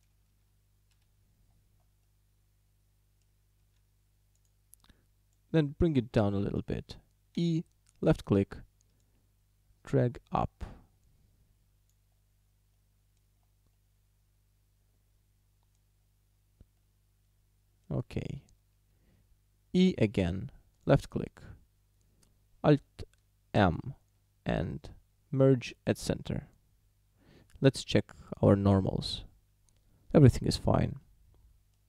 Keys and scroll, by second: 1.0 ., 3.6 s, 7.4 e, 19.8 e, 23.6 alt+m.